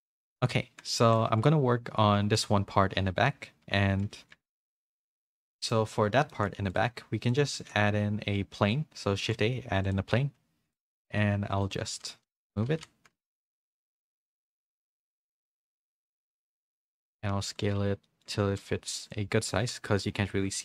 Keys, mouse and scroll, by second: 0.0 a, 0.0 KP_Decimal, 0.0 KP_3, 1.0 shift+middle click, 1.3 z, 4.0 z, 4.0 a, 4.7 a, 5.3 middle click, 6.3 shift+middle click, 6.7 click, 7.2 click, 7.5 shift+a, 9.9 shift+a, 10.1 s, 10.9 g, 12.1 g, 12.7 r, 15.6 s, 18.2 middle click, 18.2 s, 19.5 s, 20.3 KP_4.